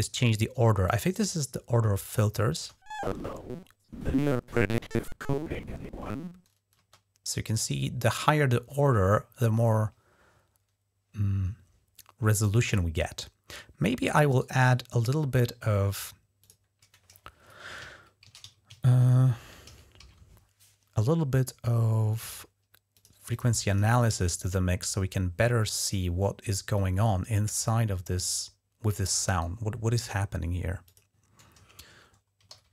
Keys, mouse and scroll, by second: 0.6-2.2 drag, 2.3 space, 6.5 space, 14.1 right click, 16.2 click, 18.1-19.8 typing, 21.9 click, 22.0 click, 22.7 click, 23.1 click, 23.5 click, 26.5-28.1 drag, 29.1 right click, 30.6 click, 32.0-32.7 typing.